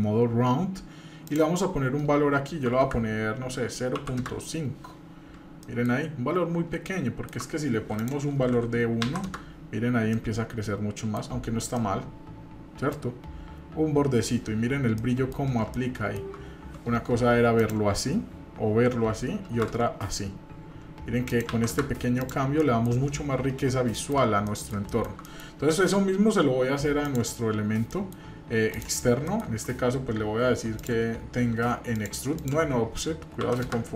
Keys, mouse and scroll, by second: 1.3-4.2 drag, 5.6 middle click, 6.1 scroll up 2, 6.8 shift+middle click, 8.0-9.3 drag, 10.1-11.2 middle drag, 11.5 scroll down 1, 11.8-12.9 middle drag, 13.1 scroll up 1, 13.8 scroll up 1, 14.3 scroll down 2, 15.0 middle click, 15.7-16.3 shift+middle drag, 17.6-19.9 drag, 21.3 click, 22.2 click, 22.6 middle drag, 22.9-23.7 scroll down 1, 23.9 shift+middle click, 24.5 middle drag, 24.9 shift+middle drag, 25.3 middle click, 27.0 click, 27.9 middle click, 28.7 click, 29.3 middle click, 30.8-32.0 drag, 32.4-33.7 drag.